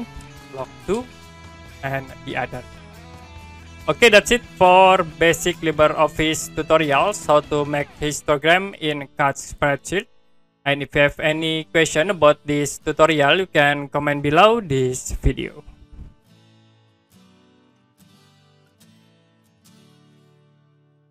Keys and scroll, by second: 0.3 shift+l, 0.5 o, 0.8 space, 1.0 2, 16.6 Print.